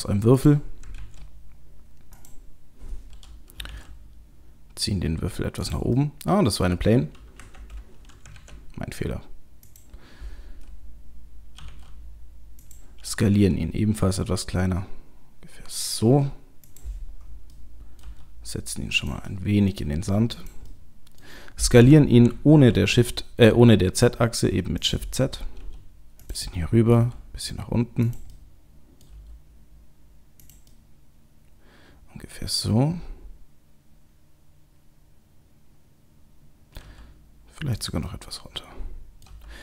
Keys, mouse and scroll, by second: 0.4 click, 0.9 shift+a, 3.6 g, 6.0 middle click, 7.4 Delete, 8.4 shift+a, 11.6 g, 13.3 s, 17.5 middle click, 18.0 g, 19.3 middle click, 20.0 g, 20.7 middle click, 21.8 s, 25.6 g, 26.5 middle click, 27.0 g, 28.3 middle click, 29.1 g, 30.7 middle click, 36.8 g, 38.1 middle click, 39.3 g.